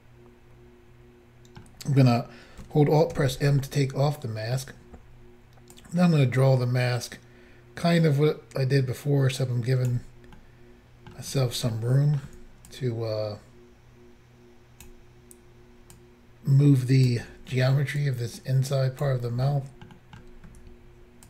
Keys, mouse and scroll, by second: 1.8 scroll up 1, 3.2 alt+m, 3.7 middle click, 10.4 middle click, 11.8 middle click, 12.8 ctrl+click, 18.1 ctrl+click, 19.5 middle click, 20.0 middle click, 20.6 ctrl+scroll up 1.